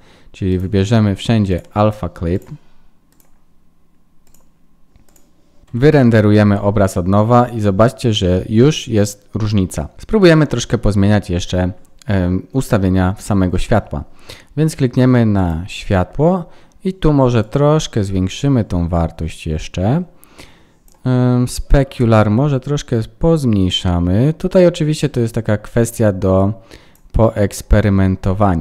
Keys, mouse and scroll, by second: 0.5 click, 1.5 click, 3.1 click, 5.7 F12, 15.4 click, 17.4 click, 21.9 click.